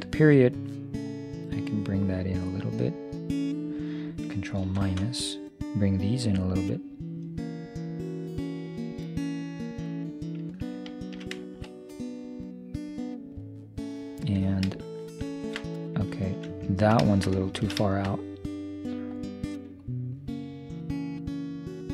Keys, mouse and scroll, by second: 1.1-3.0 drag, 4.9 ctrl+KP_Subtract, 6.5-8.4 drag, 10.9-13.9 middle drag, 16.2 right click, 16.7-19.2 middle drag, 19.2-21.8 drag.